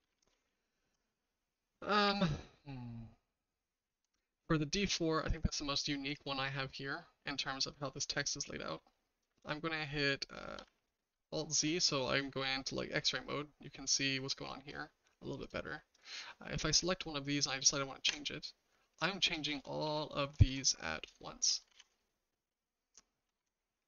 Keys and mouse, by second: 0.0 ctrl+z, 0.2 ctrl+z, 0.3 ctrl+z, 0.5 ctrl+z, 1.5-2.0 middle drag, 2.8-3.3 middle drag, 3.5-4.0 shift+middle drag, 5.3-5.7 middle drag, 6.1-7.0 middle drag, 10.7 alt+z, 12.3-14.6 shift+middle drag, 15.9 click, 16.9 click, 18.1 Tab, 19.2-19.8 typing, 20.5 Tab, 21.1-21.5 shift+middle drag, 21.7 alt+z, 22.0-23.3 shift+middle drag.